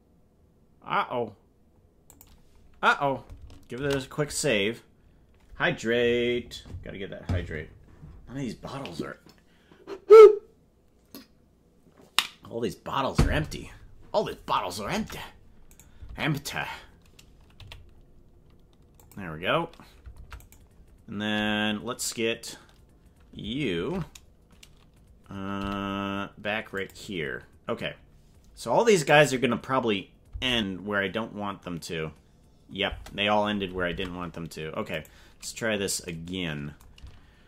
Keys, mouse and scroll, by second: 3.9 ctrl+s, 14.9 ctrl+Tab, 15.7 right click, 16.0 ctrl+Tab, 17.5 g, 20.1 ctrl+Tab, 20.4 right click, 23.7 ctrl+Tab, 25.5 g, 29.0 click, 30.3 space, 33.0 space, 33.9 ctrl+Tab, 35.0 right click.